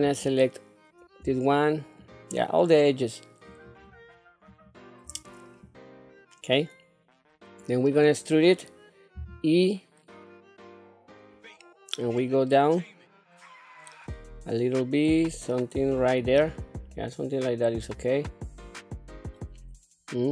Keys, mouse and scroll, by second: 0.0 click, 2.0 shift+click, 3.5 shift+click, 4.5 shift+click, 5.6-7.6 middle drag, 9.1 e, 16.9-20.3 middle drag.